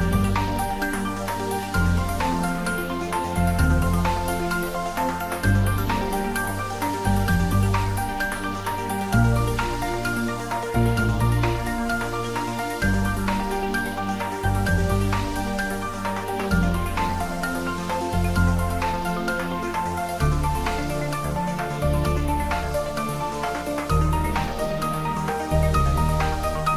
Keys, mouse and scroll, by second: 0.4-1.8 scroll down 1, 1.8-3.5 middle drag, 3.5-3.9 scroll up 1, 6.2-6.6 scroll up 1, 6.6-9.8 middle drag, 9.8-10.3 scroll up 1, 10.3-13.2 middle drag, 13.2-15.6 middle drag, 15.6 ctrl+j, 17.4 ctrl+3, 18.0-20.6 middle drag, 20.6 Tab, 21.8 ctrl+r, 22.8 click, 24.3 ctrl+z, 25.2 ctrl+r, 26.1 click.